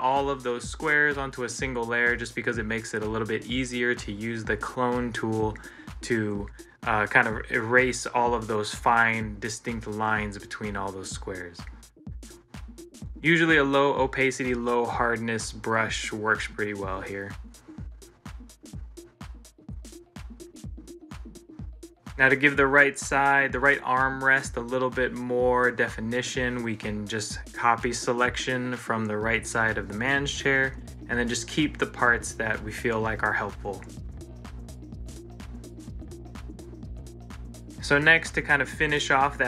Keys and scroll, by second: 1.4 ctrl+z, 20.3 ctrl+c, 20.6 ctrl+l, 37.1 ctrl+c, 37.5 ctrl+l.